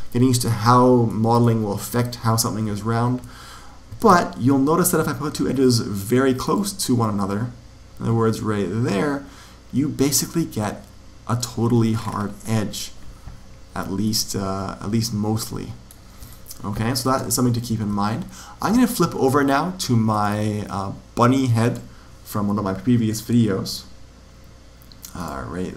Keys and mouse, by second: 1.0-2.3 middle drag, 3.9 ctrl+r, 11.3 click, 13.8-15.7 middle drag, 16.2-17.5 middle drag, 17.5 ctrl+z, 20.0 click.